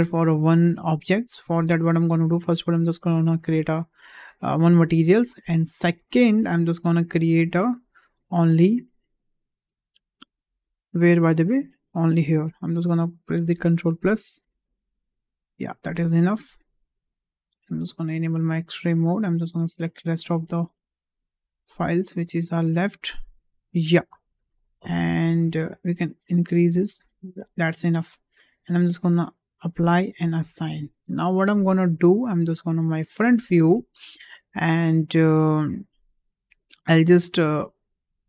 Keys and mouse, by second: 1.1 click, 2.2 click, 3.4 Tab, 4.4 Tab, 6.1 click, 7.4 Tab, 8.3 shift+middle click, 10.8 2, 11.7 alt+click, 13.5 ctrl+KP_Add, 13.7 ctrl+KP_Add, 13.9 ctrl+KP_Add, 14.3 ctrl+KP_Add, 14.6 ctrl+KP_Add, 17.7 click, 18.7 shift+click, 20.4 ctrl+z, 21.2 shift+click, 23.1-24.2 middle drag, 26.4 ctrl+KP_Add, 26.9 ctrl+KP_Add, 28.7 click, 29.8 click, 31.3 click, 33.0 Tab, 34.6 shift+middle drag, 34.7 shift+click.